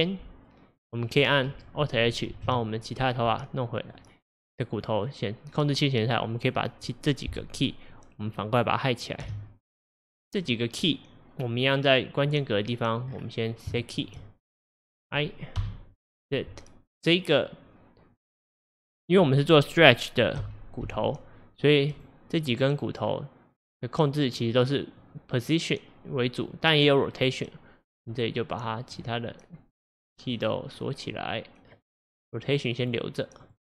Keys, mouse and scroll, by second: 0.0-1.3 drag, 2.4 alt+h, 3.0-3.3 scroll up 4, 4.0 drag, 6.1 click, 9.3 h, 9.9 drag, 10.5 click, 11.7-15.1 drag, 13.1 scroll down 1, 13.8-14.4 shift+middle drag, 15.7 i, 18.2 click, 20.5 n, 20.9 n, 22.0 click, 22.6 click, 23.6 scroll up 1, 25.1-27.4 drag, 28.7-29.8 drag, 30.4 click, 31.8-33.6 drag.